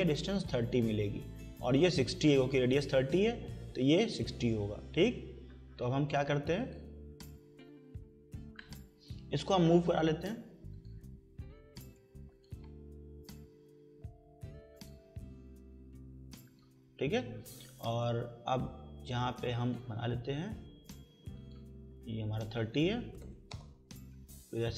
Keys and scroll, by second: 13.1 Return, 22.8-23.7 typing.